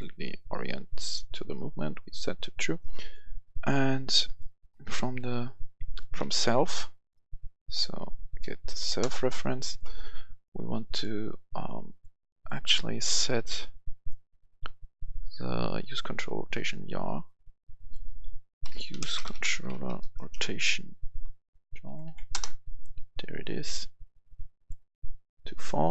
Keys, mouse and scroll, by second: 5.8 right click, 6.1-8.4 typing, 8.8 Return, 9.5 right click, 10.8 click, 12.6 click, 18.6-19.9 typing, 21.0 Down, 21.4 Down, 21.8 Down, 22.0 Down, 22.3 Return, 23.5-25.9 drag.